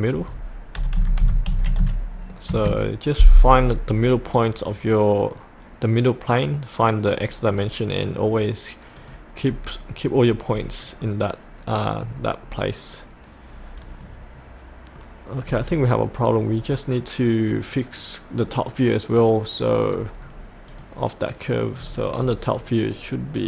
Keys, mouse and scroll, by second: 0.7 KP_8, 1.8 KP_5, 9.0 click, 9.4-11.0 scroll up 1, 11.0 middle click, 12.4-15.0 scroll down 1, 15.0-16.1 middle drag, 16.1 click, 20.2-20.7 scroll down 1, 20.7 click, 21.7-23.3 scroll down 1, 23.3 click.